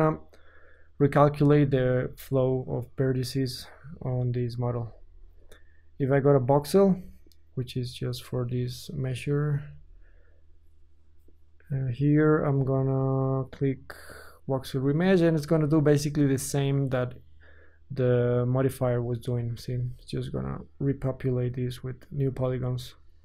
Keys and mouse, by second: 4.9 ctrl+z, 6.4-8.0 middle drag, 8.0-16.1 drag, 16.3 click, 16.7-23.2 drag, 18.7 Tab.